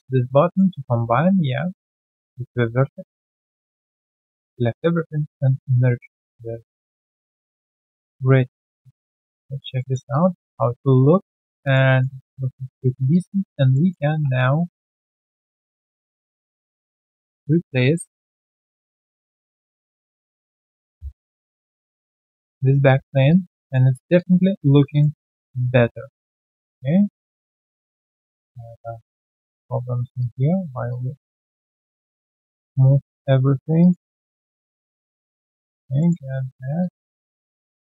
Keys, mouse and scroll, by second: 0.5 alt+middle click, 1.0 right click, 3.4 scroll down 1, 3.5 shift+right click, 6.1 alt+click, 6.7 alt+right click, 7.3 scroll down 1, 8.0 3, 8.1 alt+right click, 8.7 alt+click, 8.9 alt+right click, 9.1 alt+click, 9.4 alt+right click, 9.7 alt+middle click, 10.1 alt+click, 10.5 alt+right click, 10.7 alt+click, 11.8 alt+right click, 12.1 alt+click, 12.4-12.7 alt+scroll down 1, 12.8 alt+middle click, 13.1 alt+click, 13.7 alt+middle click, 13.9 alt+scroll down 2, 14.0 w, 16.0 alt+right click, 16.9 w, 17.1 alt+click, 18.3 alt+click, 21.4 middle click, 21.7-23.2 typing, 22.0 alt+click, 22.4 right click, 23.2 alt+click, 23.5 alt+double click, 23.9 alt+right click, 24.1 alt+click, 24.3 alt+scroll down 1, 25.1 alt+scroll down 1, 25.2 alt+click, 25.7 alt+click, 25.9 alt+click, 26.4 alt+click, 29.1 alt+click, 30.2 alt+click, 32.4 alt+click, 34.6 0, 34.7 Return, 35.6 alt+click, 36.0 alt+middle click, 36.2 alt+click, 36.6 alt+right click, 36.8 alt+click, 37.5 alt+click, 37.6 alt+click.